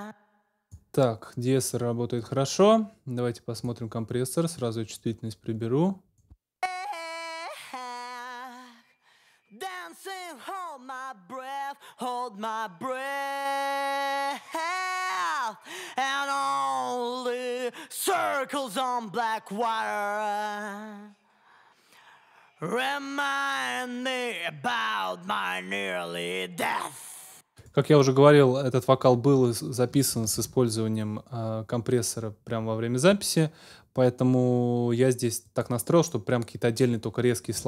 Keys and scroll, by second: 6.3 space, 27.1 space, 30.3 super+s.